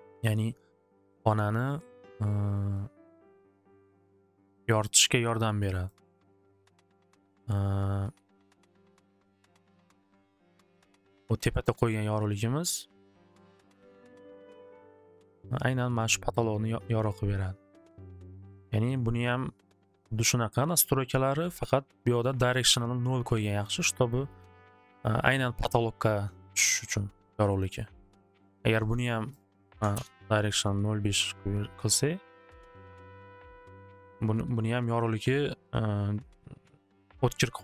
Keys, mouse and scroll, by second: 0.3 click, 3.1 click, 3.9 click, 4.5 click, 4.8 click, 5.3 click, 5.8 click, 8.7 right click, 13.2 click, 14.1 click, 22.7 click, 23.6 click, 24.3 click, 29.3 click, 29.7 5, 29.9 Return, 31.6 click, 32.7 click, 33.0 click, 33.1 5, 33.5 click, 34.1 Return, 34.8 middle click.